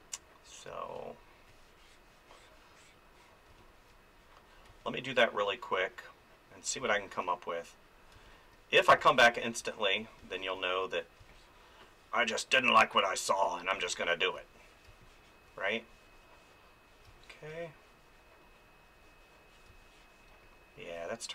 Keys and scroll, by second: 3.5 space, 6.8 space, 13.8 space, 17.1 space, 19.7 space.